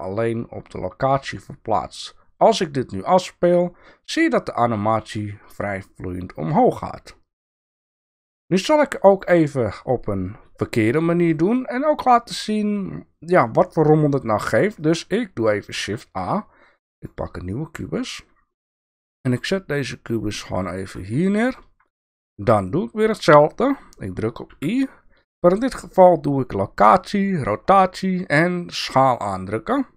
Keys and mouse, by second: 2.5 click, 9.2 click, 14.8 click, 15.7 shift+a, 17.5 shift+middle drag, 18.7 g, 21.2-21.6 shift+middle drag, 24.5 i.